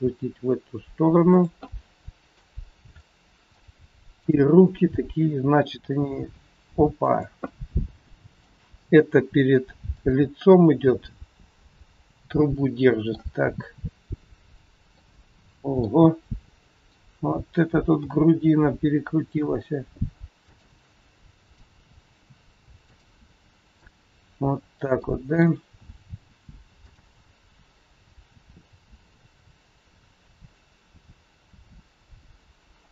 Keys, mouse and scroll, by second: 0.0 r, 1.6 middle click, 2.6-3.0 scroll up 3, 3.0 middle click, 4.1 click, 6.0 g, 8.2 middle click, 8.6 g, 10.5 middle click, 15.0 middle click, 16.6 click, 17.8 r, 21.4 click, 22.0 r, 25.0 middle click, 26.0 scroll down 1, 26.7 click, 28.0 g.